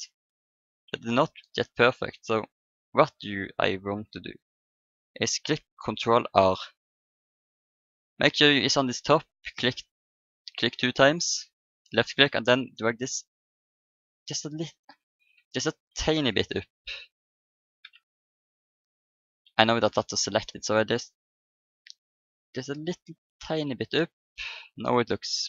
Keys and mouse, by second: 0.9 a, 6.3 ctrl+r, 10.1-13.1 middle drag, 12.7-14.5 drag, 15.3 ctrl+z, 16.3 KP_1, 17.3-19.0 middle drag, 19.9 click, 20.4-21.4 middle drag, 21.4-23.0 drag, 23.4 Tab, 23.9 click.